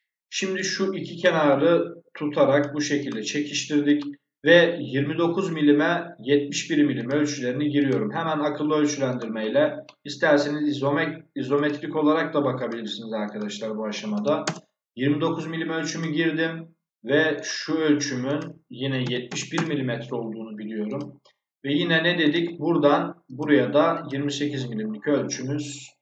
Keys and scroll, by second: 13.8 2, 14.0 9, 14.4 Return, 18.9 7, 19.4 Return.